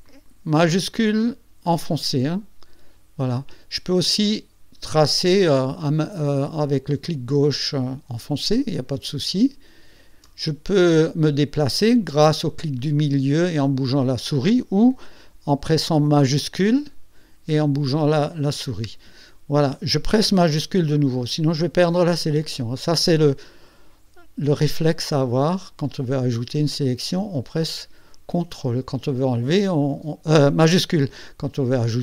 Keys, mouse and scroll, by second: 0.0 shift+click, 1.6 shift+click, 3.3 shift+click, 4.2-10.4 shift+drag, 12.2-14.4 drag, 14.4 scroll up 1, 16.2 space, 23.5 shift+click, 24.6 shift+click, 25.8 shift+click, 26.8 shift+click, 28.5 shift+click, 29.8 shift+click.